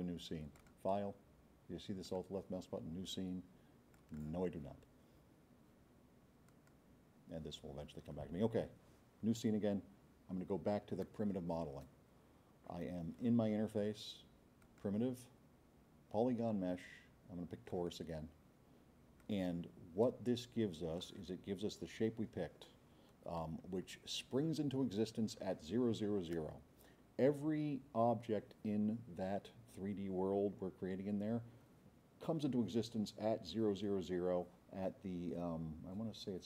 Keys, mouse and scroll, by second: 0.6 click, 2.0 click, 3.9 click, 6.5 click, 14.6 click, 17.7 click, 19.2-19.5 drag, 20.1-21.0 drag.